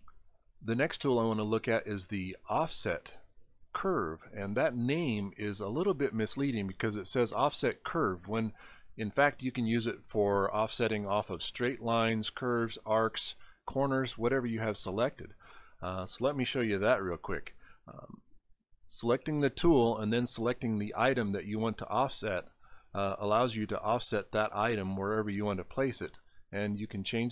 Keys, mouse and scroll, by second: 1.7 click, 21.0 click.